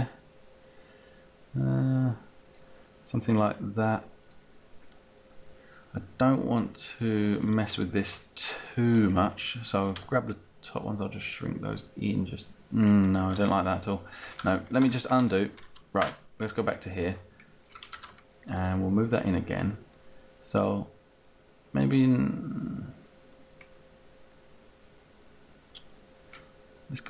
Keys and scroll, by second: 10.0 t, 13.4 ctrl+z, 15.9 space, 16.8 space, 17.9 ctrl+z, 18.8 ctrl+z.